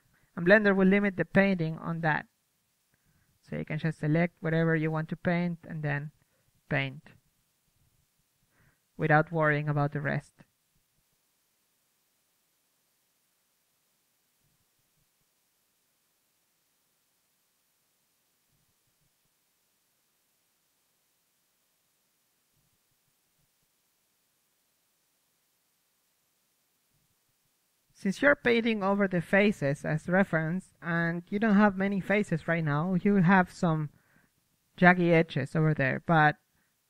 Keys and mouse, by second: 0.5 a, 2.5 middle click, 2.7 right click, 2.8 KP_3, 3.7 a, 4.0 c, 8.6-9.9 right drag, 8.8-10.4 middle drag, 10.4-12.8 right drag, 11.0 c, 12.4 middle click, 13.0-15.6 typing, 16.8 middle click, 16.9 right click, 17.0 middle click, 17.0 right click, 17.1 c, 18.4 right click, 18.4 middle click, 18.6 click, 18.6 c, 19.2-20.4 right drag, 19.3 click, 19.8 ctrl+z, 20.1 c, 20.9 click, 20.9-22.0 middle drag, 21.5 c, 21.6 a, 21.8 ctrl+z, 22.9 z, 23.0 KP_3, 23.0 c, 23.4-27.2 middle drag, 23.5 z, 27.2 KP_1, 27.6 Tab, 28.0-29.0 drag, 29.1 click, 30.0-31.4 drag, 30.9 KP_1, 31.7 Tab, 32.0 Tab, 32.0 alt+z, 32.2 alt+z, 32.3 alt+z, 32.4 m, 32.5 m, 32.8 ctrl+z, 32.8 Tab, 33.4 Tab, 33.6 Tab, 33.7 Tab, 33.8 KP_1, 34.0 m, 34.7 KP_3, 35.4 KP_1.